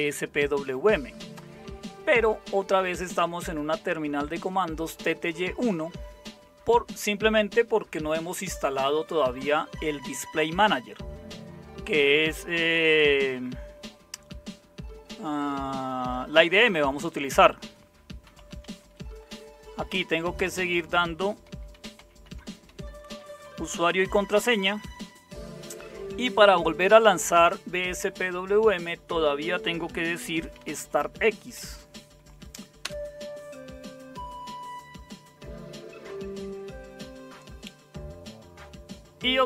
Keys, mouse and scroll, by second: 18.0-19.8 typing, 20.4 Return, 21.2-24.6 typing, 29.9-31.5 typing, 32.8 Return.